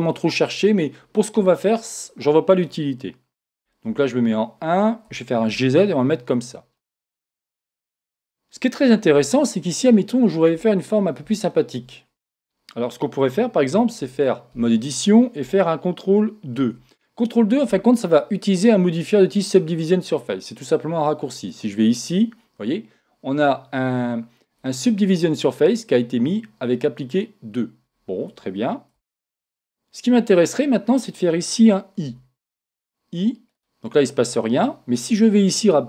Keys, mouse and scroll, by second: 3.8 KP_1, 5.0 g, 6.4 click, 6.8-11.0 middle drag, 11.0-11.3 scroll up 2, 11.3-13.0 middle drag, 14.0 Tab, 16.5 ctrl+2, 21.5 click, 28.9 Tab, 32.0 i, 33.6 click.